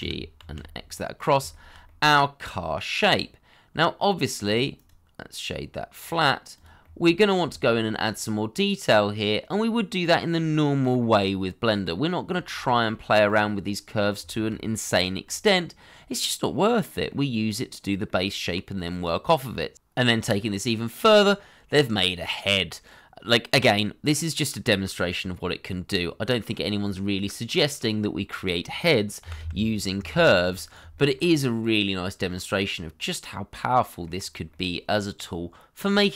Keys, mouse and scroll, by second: 0.0 y, 0.5 x, 1.5 shift+middle click, 1.8 middle click, 4.1-4.8 scroll up 1, 4.8 right click, 6.8 middle click, 7.5 shift+middle click, 7.8-8.1 scroll up 1, 8.1 middle click, 10.6-11.0 scroll down 1, 11.0 middle click, 12.2 scroll down 1, 12.5 shift+middle click, 13.7 middle click, 14.3 shift+middle click, 15.3 middle click, 22.7 middle click, 29.2 g, 29.4 y, 30.6 x, 30.9 shift+middle click, 31.4 middle click, 34.1-34.5 scroll up 1.